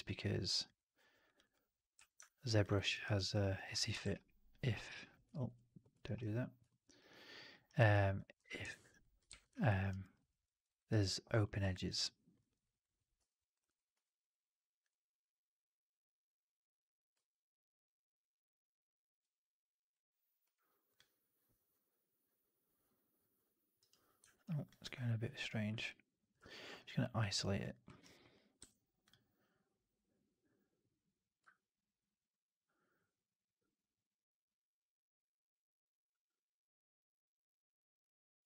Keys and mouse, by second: 0.6 click, 1.4 click, 2.6 middle click, 2.8 right click, 3.0 right click, 3.2 alt+click, 4.1 ctrl+d, 5.4 ctrl+z, 6.2 ctrl+f, 6.6 alt+click, 6.8 alt+right click, 7.6 alt+right click, 7.8 alt+click, 8.6 alt+drag, 8.8 alt+right click, 9.2 shift+x, 9.7 alt+right drag, 9.9 alt+right drag, 10.1 alt+drag, 10.4 alt+middle drag, 10.6 alt+right drag, 10.8 alt+right drag, 11.0 alt+drag, 11.3 alt+middle click, 11.7 alt+right drag, 11.8 alt+right drag, 12.3 alt+middle drag, 12.5 alt+right drag, 13.9 q, 20.3 q, 24.2 alt+right drag, 24.6 alt+drag, 26.3 alt+q, 26.7 drag, 26.9 middle drag, 27.2 right drag, 27.5 click, 27.8 middle drag, 27.9 right drag, 28.1 alt+right drag, 28.5 q.